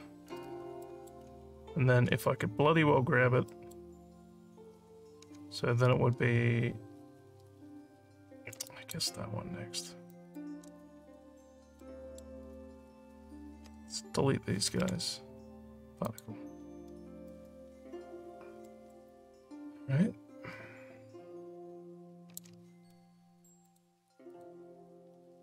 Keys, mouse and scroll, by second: 0.8 alt+middle click, 1.4 shift+scroll up 2, 2.6 alt+scroll up 1, 3.5 alt+middle click, 8.7 shift+click, 10.0 shift+click, 11.1 alt+scroll down 1, 11.7 alt+middle click, 16.0 click, 17.7 alt+scroll down 2, 18.5 alt+scroll up 1, 18.6 alt+middle click, 19.1-22.4 alt+drag, 23.6 click, 24.3 click.